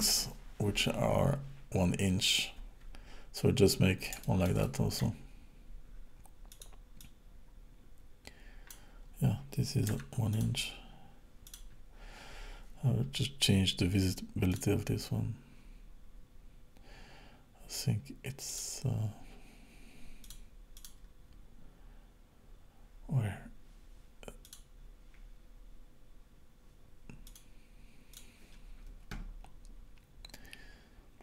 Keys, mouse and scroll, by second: 3.6-4.1 scroll down 2, 4.3 shift+middle click, 4.6 middle click, 6.6 click, 7.0 click, 9.9 x, 11.5 click, 14.6 click, 15.1-17.6 scroll down 8, 18.5 click, 20.2 click, 20.8 click, 24.5 click, 25.1-27.3 scroll down 5, 27.3 click, 28.1 click.